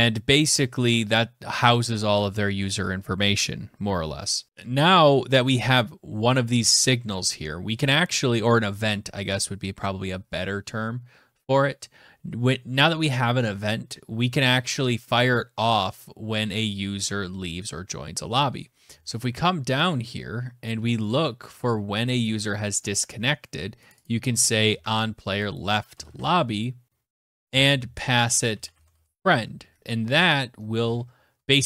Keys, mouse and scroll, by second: 4.8 click, 4.9 click, 7.1-8.8 scroll, 8.8-9.9 scroll, 10.7-11.7 scroll, 11.7-13.0 scroll, 13.0-14.5 scroll, 17.7 scroll, 19.1 click, 21.4 click, 23.2 click, 23.4 click, 24.0 ctrl+c, 24.7 click, 25.3 Return, 25.4 ctrl+v, 26.8-29.0 typing, 29.8 Escape.